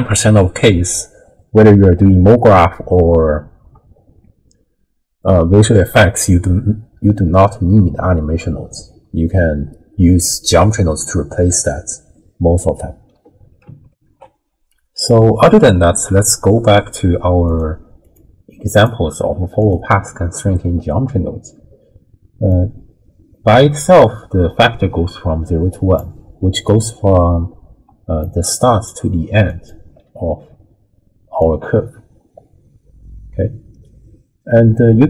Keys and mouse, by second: 10.1 click, 13.9 ctrl+alt+shift+w, 14.2 ctrl+alt+shift+q, 17.5 click, 18.0 click, 18.7 click, 19.6 click, 22.6-26.0 drag, 27.9-29.4 d, 28.2 click, 29.5 click, 29.7 d, 29.8 d, 30.6 d, 31.4-35.0 drag.